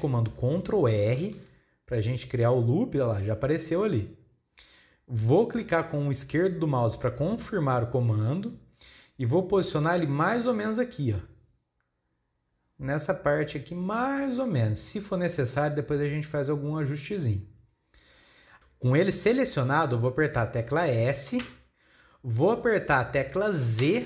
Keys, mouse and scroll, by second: 1.2 ctrl+r.